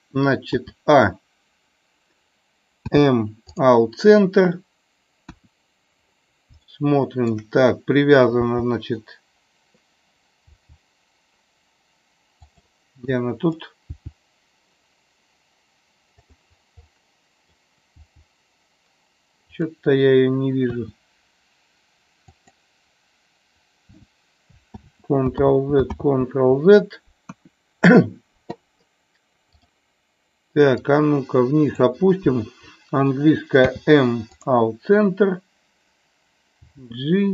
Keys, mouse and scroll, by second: 5.2 KP_1, 6.7 shift+middle click, 13.1 click, 16.2 click, 16.8 middle click, 19.5 click, 22.5 click, 24.8 ctrl+z, 27.2 ctrl+z, 27.2 KP_1, 29.6 click, 30.8-31.8 drag.